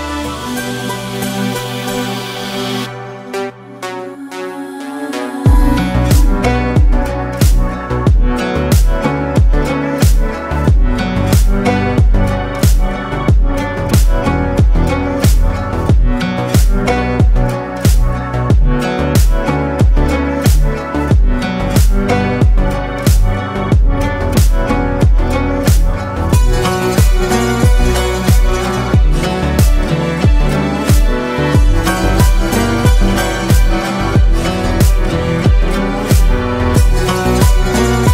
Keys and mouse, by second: 0.0 middle click, 1.8 click, 2.4 middle click, 4.4 click, 5.4 click, 6.7 click, 26.6 click, 35.3 drag.